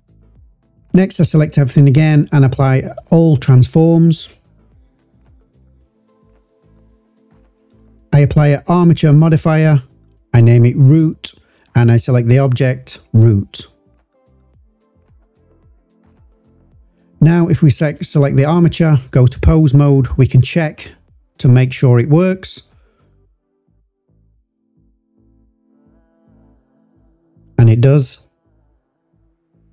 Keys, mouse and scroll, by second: 0.2 shift+click, 1.4-3.2 drag, 4.9 click, 6.4 click, 7.2-8.7 drag, 9.3-10.6 drag, 10.3 o, 11.6-12.7 drag, 16.8 click, 17.2 click, 18.5-19.5 drag, 20.1 click, 20.7 click, 21.4 click, 22.9 e, 24.6 click, 25.6 click, 25.9 click.